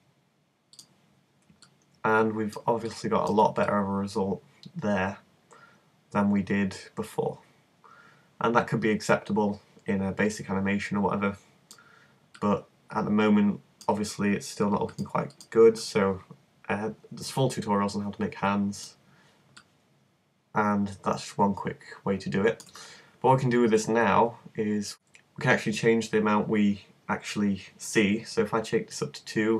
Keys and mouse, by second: 4.5-6.1 super+middle drag, 12.4-14.9 middle drag, 15.5-16.7 drag, 16.7 middle click, 19.6-21.6 middle drag.